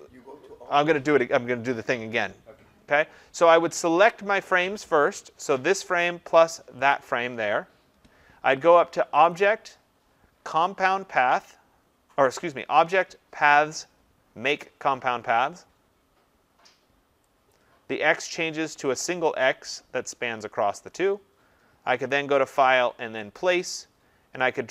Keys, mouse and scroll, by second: 6.1 click, 6.9 shift+click, 9.3 click, 17.5 click, 22.1 click, 23.4 click.